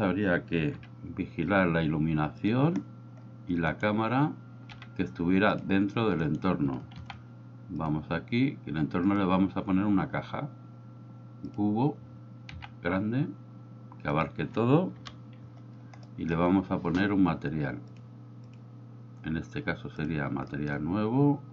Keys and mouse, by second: 0.8 g, 2.5 click, 3.8 right click, 4.8 g, 5.6 click, 6.3 right click, 7.0 shift+s, 9.2-11.7 drag, 12.6 s, 14.1 click, 15.1 KP_1, 16.1 middle click, 17.9-18.6 drag, 20.1 drag, 20.6 middle click.